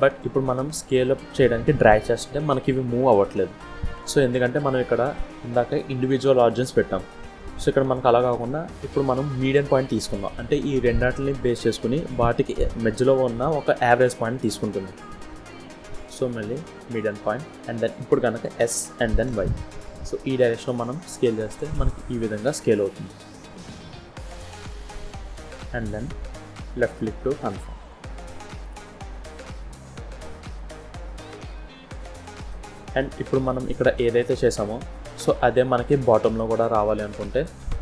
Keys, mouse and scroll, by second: 4.8 click, 15.2 click, 18.4 s, 28.2-28.7 scroll down 4, 28.7 middle click, 31.3-31.7 scroll up 2, 32.1 click, 32.1 scroll down 1, 32.2 middle click, 33.3 click, 34.4 scroll down 1, 34.6 middle click, 37.2 click.